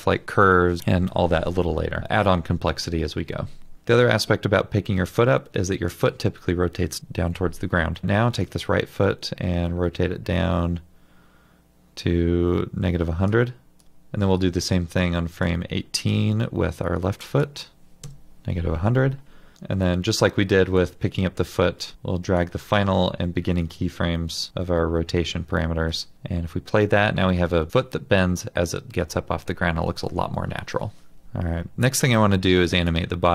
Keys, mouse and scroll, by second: 13.8 Return, 18.0 typing, 18.1 Return.